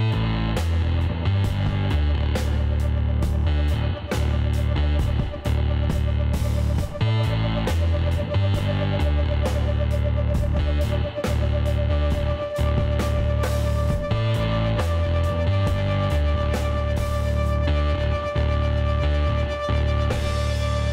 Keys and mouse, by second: 0.4-3.0 drag, 1.5 ctrl+z, 3.0-4.5 middle drag, 3.9 ctrl+KP_Decimal, 5.6 click, 6.6 Tab, 6.8 middle click, 7.4 a, 7.7-9.3 middle drag, 9.7 a, 11.8 click, 12.4 a, 12.6-13.6 middle drag, 13.6 click, 13.9 middle click.